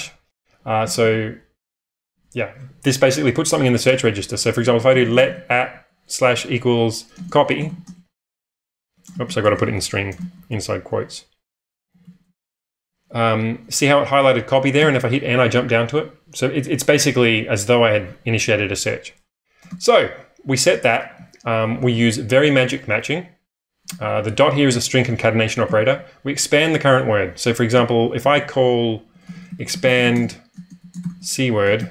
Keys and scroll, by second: 0.8 j, 1.0 j, 2.1 b, 2.3 b, 4.2-12.7 typing, 14.8 n, 19.6 q, 20.7-22.3 typing, 23.8-24.5 typing, 25.6 typing, 28.2-31.9 typing.